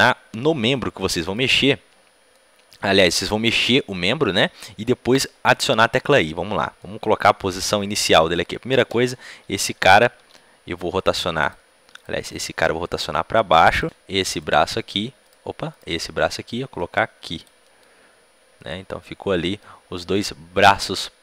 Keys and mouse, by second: 0.0-6.7 right drag, 2.3 middle click, 2.3 click, 2.7-6.7 middle drag, 6.7-7.9 drag, 7.9-9.2 middle drag, 9.7 t, 10.1 r, 11.9-13.5 right drag, 12.1 r, 13.8 click, 13.8 g, 14.3-17.3 right drag, 14.5 g, 15.9 g, 17.5-19.7 drag, 19.7-21.2 middle drag.